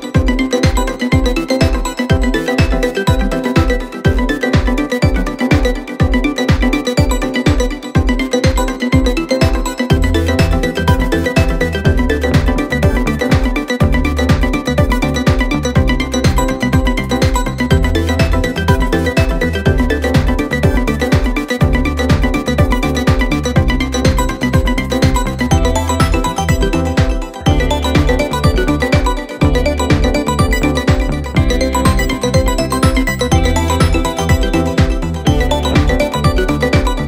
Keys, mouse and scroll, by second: 0.5 click, 0.7 shift+a, 2.1 s, 3.8 g, 6.6 a, 7.1 g, 10.1 click, 10.6-11.0 middle drag, 11.0-11.5 scroll up 9, 11.5 click, 11.9 g, 13.9 KP_0, 14.2 scroll down 1, 14.4-15.0 scroll up 4, 15.0 scroll down 1, 15.1 space, 16.3-17.9 scroll down 3, 17.9-18.4 middle drag, 18.4 scroll up 4, 19.8 space, 20.0 space, 21.8 KP_0, 25.2 space, 25.7 click, 26.0-26.8 middle drag, 26.8 click, 27.1-27.4 scroll up 5, 27.4-28.0 middle drag, 28.0 g, 30.1 KP_0, 30.3-30.8 scroll up 1, 30.8 ctrl+z, 30.9 ctrl+z, 31.1 ctrl+z, 32.0 click, 32.3-34.3 scroll up 3, 34.8-35.5 scroll up 6, 35.5 click, 35.8 shift+click, 36.1 shift+click, 36.4 shift+click.